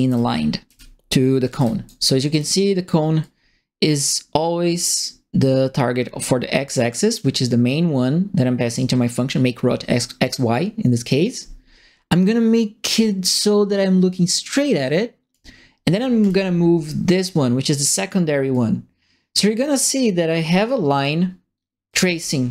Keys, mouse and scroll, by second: 0.0-1.5 typing, 2.3 click, 3.2-7.1 drag, 8.7-15.3 drag, 16.2 click, 18.5-21.0 drag, 21.8 right click, 21.9 e, 22.4 s.